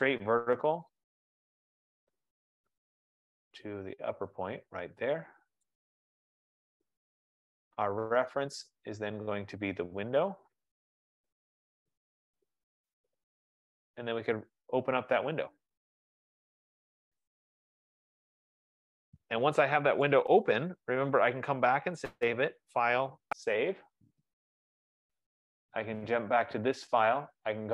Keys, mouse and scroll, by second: 1.0-1.6 scroll, 1.6-2.8 scroll, 3.4-3.8 scroll, 4.1-4.6 scroll, 4.6 scroll, 6.0 click, 7.5-8.6 scroll, 8.6-9.8 scroll, 10.3-10.8 scroll, 14.3 click, 17.6 click, 18.6-19.8 scroll, 20.3 right click, 22.6 click, 23.8 click, 26.2 click.